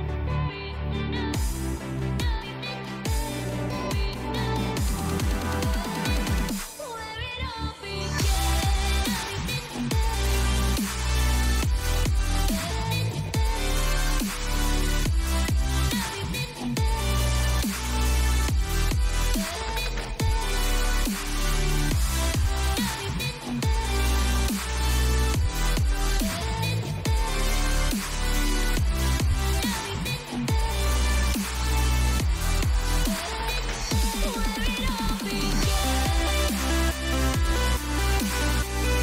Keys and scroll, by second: 23.6 ctrl+0.